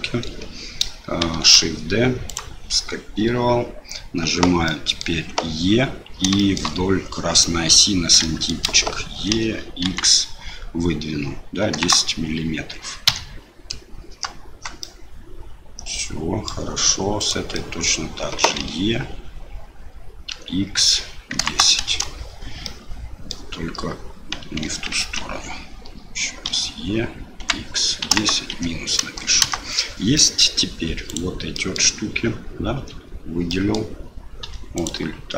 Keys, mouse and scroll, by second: 1.3 shift+d, 4.8 middle click, 6.5 shift+middle click, 8.4 shift+middle click, 9.3 e, 14.9-16.5 middle drag, 17.2 click, 17.5 middle click, 18.6 e, 22.8 middle click, 24.9 ctrl+z, 26.5 e, 30.2 middle click, 31.1 click, 31.5 middle click, 32.8 l, 33.6 middle click, 34.4 3.